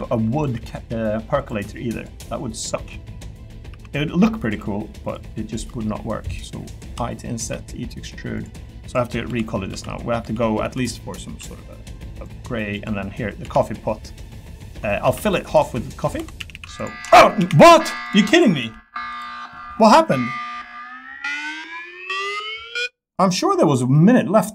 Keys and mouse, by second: 0.3 click, 0.5 s, 1.4 click, 1.5 e, 1.9 click, 2.1 e, 3.5 click, 3.7 s, 4.4 click, 4.5 e, 5.0 click, 5.6 i, 6.8 i, 7.5 e, 8.3 click, 8.9 click, 9.2 l, 9.7 l, 10.2 l, 11.2 a, 11.5 g, 12.1 click, 13.4 l, 15.0 ctrl+r, 16.1 3, 16.4 a, 16.5 a, 16.7 alt+click, 17.6 g, 18.6 g, 19.1 click.